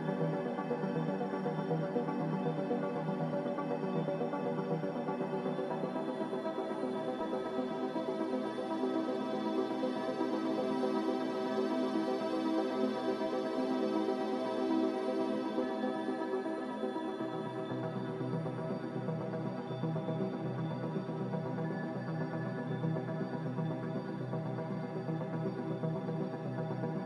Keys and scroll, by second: 2.1 z, 6.3 5, 6.6-8.8 Return, 25.3 z.